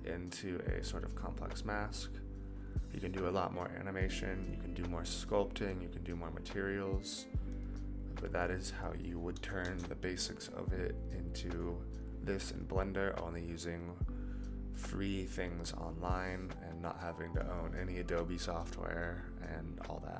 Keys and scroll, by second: 9.6 KP_0.